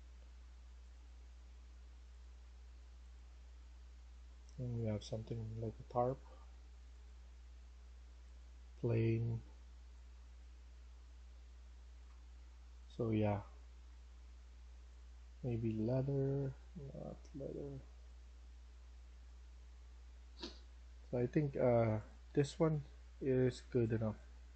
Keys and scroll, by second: 22.1 Escape, 23.8-24.5 typing.